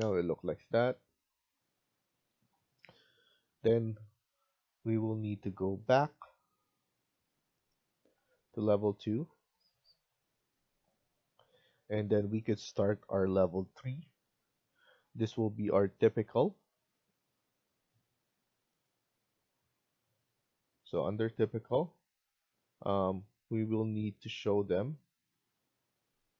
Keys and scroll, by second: 8.3 Escape.